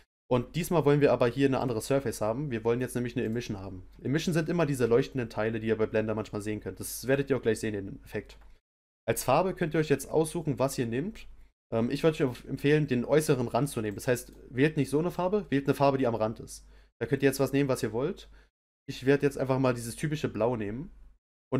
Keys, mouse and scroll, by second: 3.3-5.3 drag.